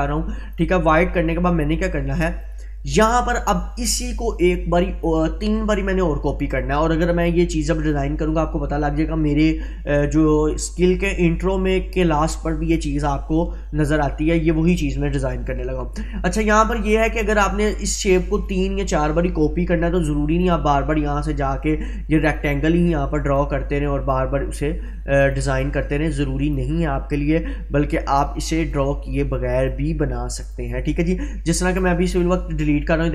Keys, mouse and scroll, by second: 20.4-22.6 drag.